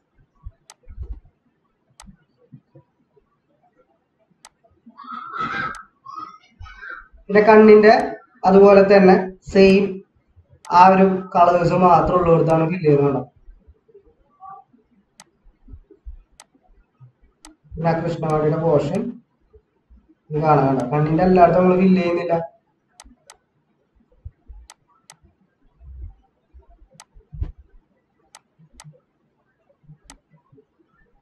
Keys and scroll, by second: 7.2 ctrl+=, 25.9 ctrl+-.